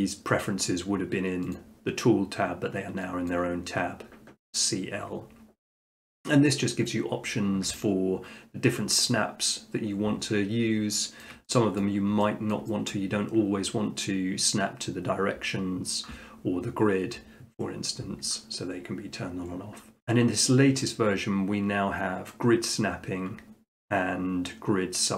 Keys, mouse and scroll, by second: 1.6-2.7 drag, 3.3-4.4 drag, 10.2 middle click, 10.5 middle click, 11.2 shift+middle click, 11.8 middle click, 12.5 shift+middle click, 12.9 middle click.